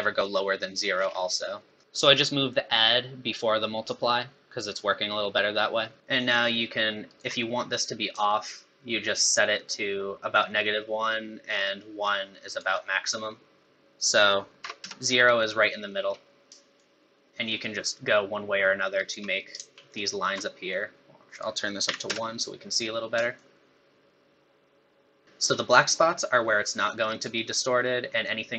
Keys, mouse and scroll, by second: 0.9 scroll down 7, 1.2 middle click, 1.7 middle click, 1.8 click, 6.0 shift+click, 8.2 shift+click, 14.0 click, 16.8 shift+click, 19.9 ctrl+shift+click, 21.3 click, 23.3 shift+click.